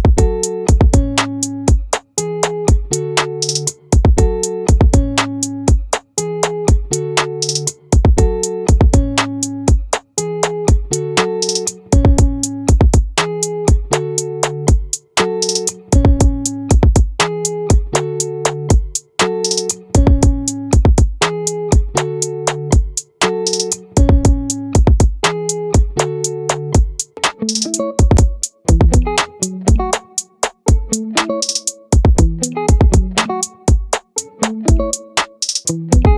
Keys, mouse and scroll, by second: 0.4 middle click, 0.8-2.1 drag, 0.8-2.1 right drag, 3.8 click, 20.8-23.1 right drag, 24.5 click, 24.7 middle click, 24.9-27.4 right drag.